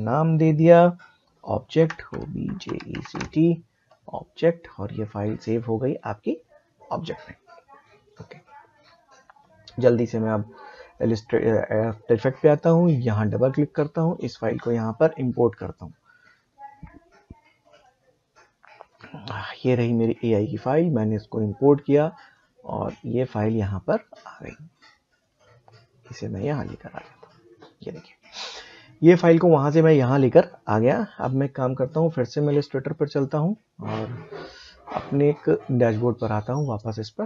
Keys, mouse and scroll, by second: 1.5-3.6 typing, 5.0 click, 8.3 click, 8.4 click, 11.0 click, 17.8 click, 25.2-31.8 drag, 35.5 click.